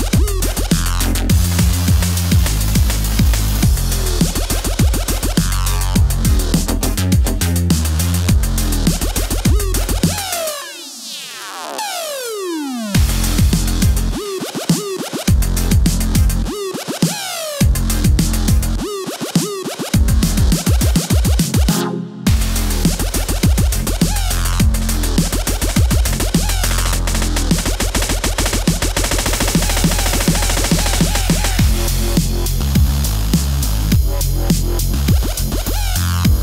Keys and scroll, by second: 0.2 super+z, 4.1 shift+super+c, 4.1-5.1 typing, 6.1 super+s, 8.3 Return, 8.6 super+Tab, 9.3 super+w, 9.9 space, 11.3 super+=, 13.0 shift+super+n, 13.2 r, 13.3 Return, 13.5 b, 20.0 super+a, 20.5 super+d, 25.9 shift+super+n, 26.1 e, 33.5 Return, 33.7 ⟲, 33.9 alt+shift+super+s, 34.4 Return.